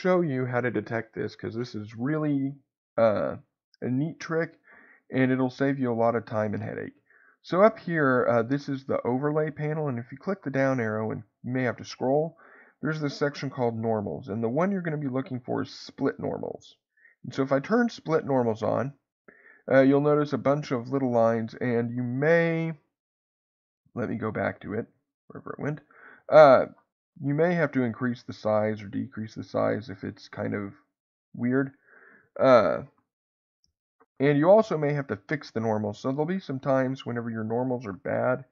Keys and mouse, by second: 9.7-19.1 drag, 20.5-21.5 middle drag, 26.2-32.0 drag, 36.0 middle click.